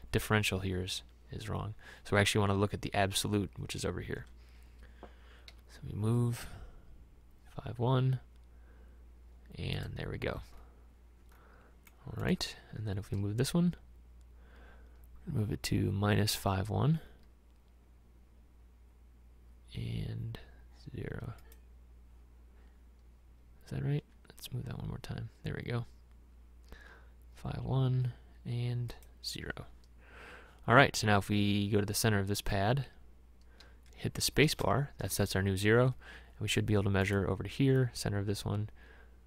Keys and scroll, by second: 5.6 m, 13.2 m, 24.1 m, 34.4 space.